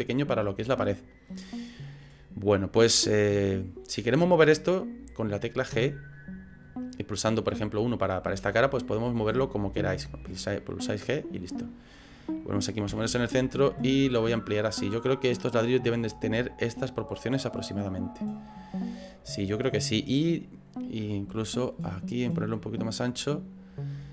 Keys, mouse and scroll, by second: 0.2 scroll down 2, 2.2 click, 3.6 right click, 4.6 right click, 5.8 g, 9.1 g, 12.9 s, 17.6 click, 20.7 click, 22.1 click.